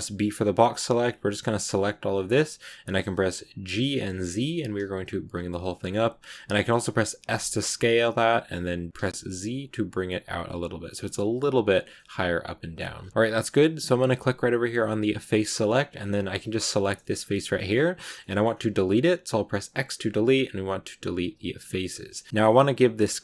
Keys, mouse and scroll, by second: 2.3-3.6 middle drag, 3.6 g, 6.4 middle click, 7.2 s, 11.8-12.8 middle drag, 12.8-15.1 scroll up 1, 15.1 click, 15.5-16.5 middle drag, 16.5 right click, 16.9 shift+middle click, 17.1 scroll up 1, 17.2 middle click, 18.0 scroll up 1, 18.1 middle click, 18.6 x, 21.6-23.2 middle drag.